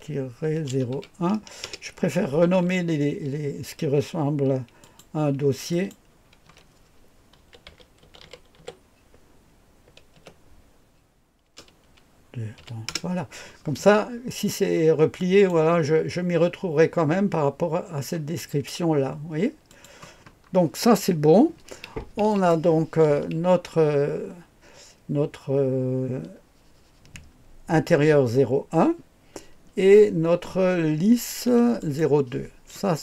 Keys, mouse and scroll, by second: 0.0-0.9 typing, 1.6 Return, 4.8 click, 5.7 click, 6.4 F2, 7.1-9.1 typing, 10.1 typing, 11.4 KP_0, 12.5 KP_2, 12.8 Return, 15.1 click, 15.5-16.2 typing, 19.6 click, 20.2-22.2 scroll down 1, 22.2 click, 31.7 click, 32.3 click, 32.8-33.0 scroll down 2.